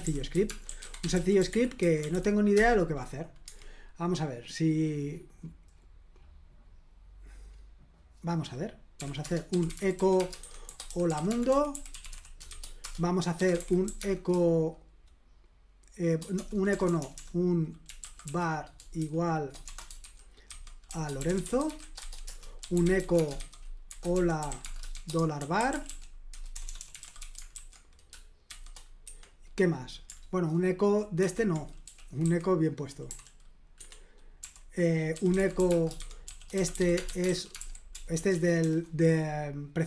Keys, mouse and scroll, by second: 0.0-2.6 typing, 4.8-7.2 scroll down 1, 7.8 click, 9.0-28.5 typing, 9.2 Return, 29.1 Escape, 31.2-33.1 typing, 33.8 Escape, 34.2-38.6 typing.